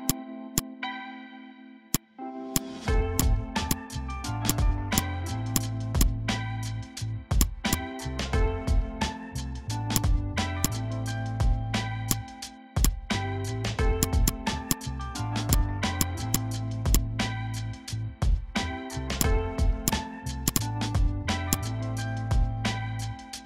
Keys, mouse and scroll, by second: 3.5 space, 3.6 click, 3.7 space, 4.4 click, 6.4 Down, 7.3 click, 8.4 Up, 9.9 click, 11.6 Delete, 12.1-14.0 drag, 14.1 space, 14.2 click, 14.3 space, 14.6 click, 16.2 space, 16.3 click, 16.4 space, 16.9 click, 18.9 Delete, 19.1-22.6 drag, 22.6 Delete.